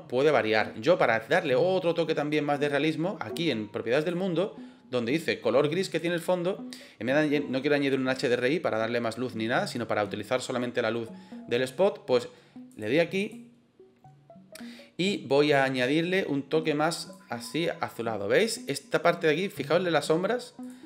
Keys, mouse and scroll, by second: 5.7 click, 12.6 click, 13.1 click, 20.5 click.